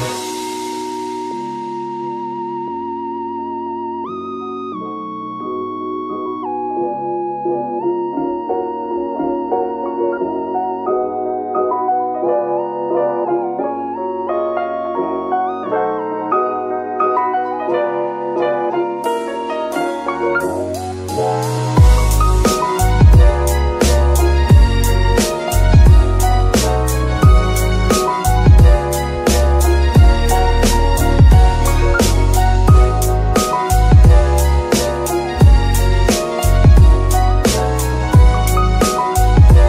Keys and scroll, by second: 1.7 g, 2.2 Escape, 10.6 g, 11.0 Escape, 13.1 ctrl+Tab, 17.5 ctrl+Tab, 26.2 g, 27.0 Escape, 27.8 g, 28.6 Escape, 29.6 g, 30.4 Escape, 31.2 g, 31.6 Escape, 32.5 g, 33.5 Escape, 34.4 g, 35.3 Escape, 38.5 g, 39.5 Escape.